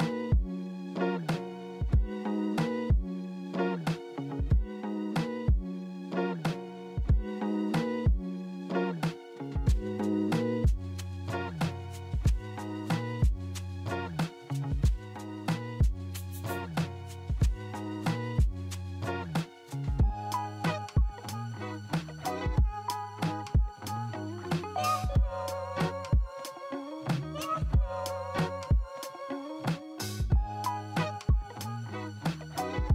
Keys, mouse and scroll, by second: 1.0 Return, 2.5-3.9 typing, 5.0-6.3 typing, 7.6-8.8 typing, 10.7 middle click, 13.4 double click, 15.9-16.7 typing, 15.9 double click, 17.3 middle click, 21.0 double click, 21.5-22.4 typing, 22.8 alt+middle click, 25.2 alt+middle click, 29.5-32.3 typing.